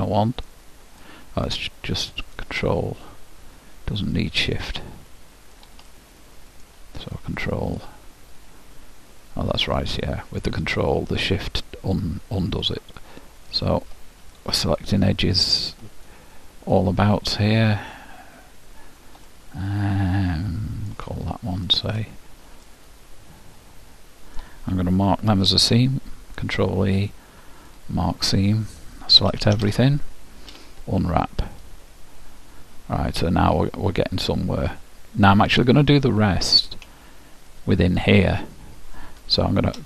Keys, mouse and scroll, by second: 0.7-3.5 right drag, 4.7-7.7 middle drag, 7.3-9.1 right drag, 9.9-13.1 middle drag, 13.1-14.9 right drag, 14.5-16.3 middle drag, 16.3-18.0 right drag, 19.5-21.1 middle drag, 21.6-23.4 right drag, 22.8-24.7 middle drag, 25.6 ctrl+e, 29.3 a, 29.7 a, 30.7 u, 33.6-39.5 middle drag.